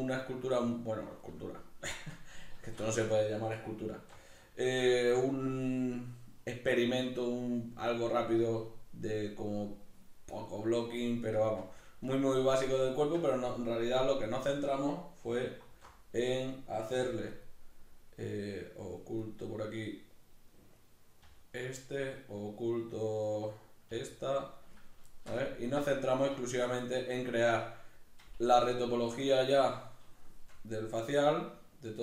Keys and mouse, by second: 3.9 alt+q, 4.6-8.9 shift+middle drag, 9.9-11.4 middle drag, 11.4 alt+q, 12.7-16.3 shift+middle drag, 15.7 alt+h, 16.3 right click, 17.1 h, 17.3 right click, 19.2 right click, 20.8 right click, 21.3 h, 21.8 right click, 23.2 right click, 23.8 h, 24.7 right click, 25.1-25.9 shift+middle drag, 25.9 right click, 26.4-32.0 shift+middle drag, 28.4 Tab.